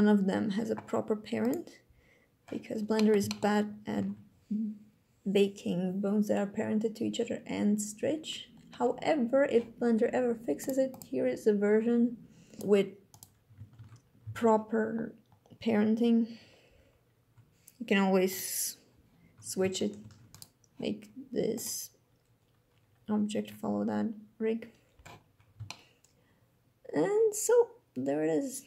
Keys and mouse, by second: 1.7 click, 2.6 drag, 2.9 shift+drag, 3.6 alt+a, 10.3 click, 10.7 click, 12.8 click, 13.5 ctrl+Tab, 13.9 a, 18.3-19.3 drag, 19.7 ctrl+Tab, 20.0-21.3 drag, 25.3 shift+drag.